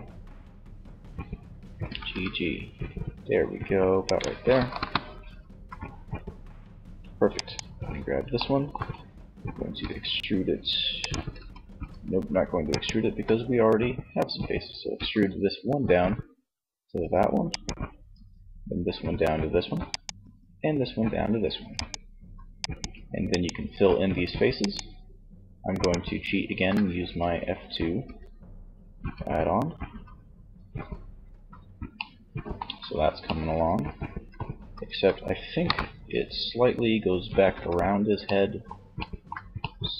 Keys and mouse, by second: 1.0 g, 3.4 click, 3.7 KP_1, 4.8 z, 7.5 middle click, 9.2 e, 10.3 ctrl+z, 12.3 z, 14.1 e, 16.7-18.5 drag, 17.5 e, 19.6 click, 19.6 e, 22.0-26.7 shift+right drag, 27.4 f, 28.2 f, 29.2 f, 30.6 z, 31.7 z, 33.4 z, 34.7 KP_1, 36.7 z.